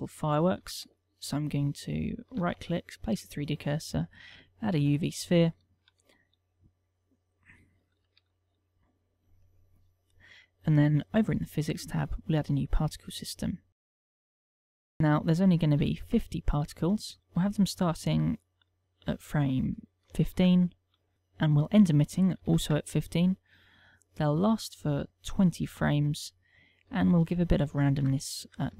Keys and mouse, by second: 1.3 shift+a, 2.6 right click, 3.0 shift+a, 6.6 s, 7.8 click, 8.8 g, 9.4 click, 11.9 click, 12.9 click, 15.5 ctrl+click, 18.2 ctrl+click, 22.2 ctrl+click, 24.9 ctrl+click, 27.6 ctrl+click.